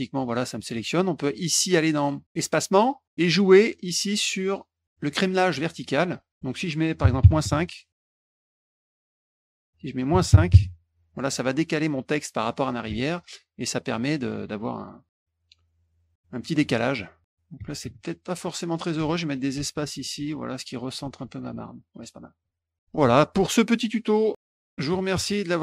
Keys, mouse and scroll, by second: 2.4 click, 8.6 a, 9.4 click, 11.4 click, 12.9 F1, 13.2 click, 14.9 click, 16.4 click, 16.5 click, 18.0 ctrl+shift+z, 18.9-20.1 typing, 21.1 F1, 21.5 click.